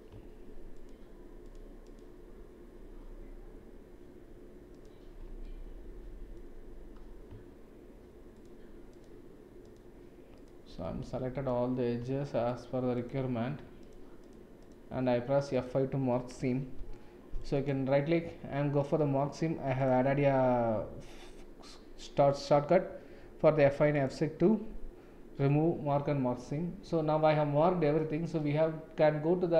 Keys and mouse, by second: 0.7 shift+click, 1.4 shift+click, 1.8 shift+click, 5.4 middle click, 8.9 shift+click, 9.6 shift+click, 10.8 middle click, 12.4 shift+click, 12.9 shift+click, 13.8 shift+click, 14.2 shift+click, 15.5 shift+click, 16.8 F5, 17.7-23.1 right drag, 23.9-25.8 right drag, 26.4-28.0 middle drag.